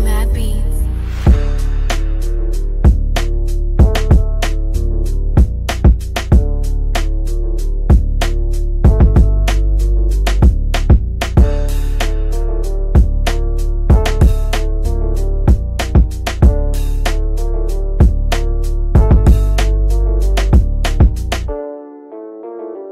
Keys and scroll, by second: 20.5 c, 22.1-22.9 typing.